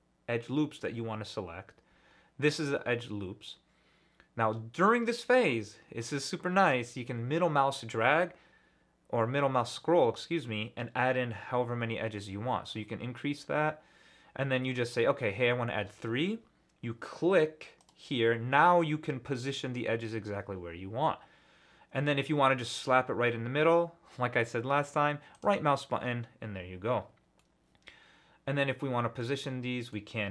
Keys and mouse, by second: 25.3-28.7 middle drag, 29.1 middle click.